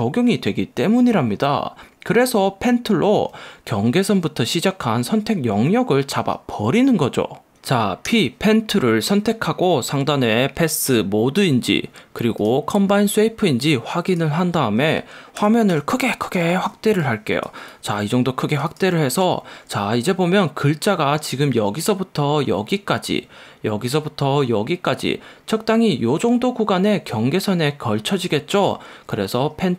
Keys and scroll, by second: 8.1 p, 15.5 super+=, 16.8 space.